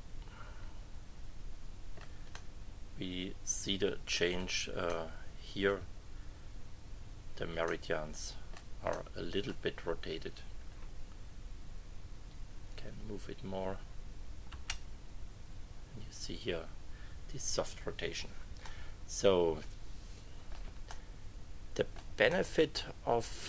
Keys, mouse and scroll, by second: 2.3 click, 2.5-4.5 middle drag, 4.8 middle click, 5.1 click, 5.6 middle click, 7.6 click, 8.2 middle click, 8.9 middle click, 12.3-13.8 drag, 14.5 Return, 18.6 middle click, 18.7-20.7 drag, 20.9-22.1 drag, 22.2 click, 23.1 scroll up 1.